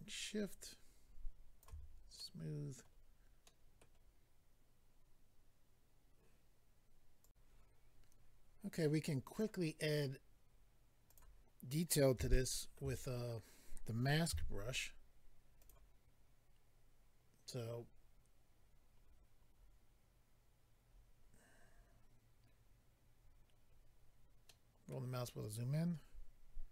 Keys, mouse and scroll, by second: 1.8-2.2 scroll down 2, 2.2 middle click, 2.9-3.4 scroll down 2, 3.8 middle click, 7.2 click, 7.3 click, 9.3 click, 11.1 click, 11.2 click, 12.3 shift+middle click, 12.9-14.0 scroll up 2, 14.3 f, 15.6 click, 18.6-19.4 scroll down 4, 20.9-21.7 scroll up 4, 23.7-24.5 scroll down 2, 24.5 middle click.